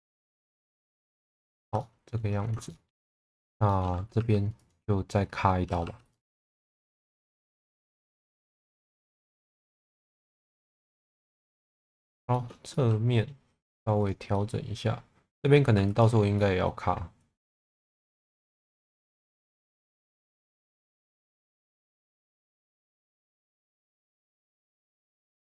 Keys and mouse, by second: 0.7 click, 1.6 Tab, 1.8 middle click, 2.7 shift+middle click, 3.1 middle click, 3.7 shift+middle click, 4.2 2, 4.7 click, 5.7 Tab, 5.8 2, 7.5 1, 8.5 middle click, 10.5 s, 10.8 KP_0, 10.9 KP_Enter, 11.6 middle click, 12.3 shift+middle click, 12.7 middle click, 14.3 middle click, 15.7 2, 16.0 click, 16.4-17.8 middle drag, 18.6 alt+middle click, 19.2 shift+middle click, 20.4 click, 23.9 1, 24.3 click, 24.9 click.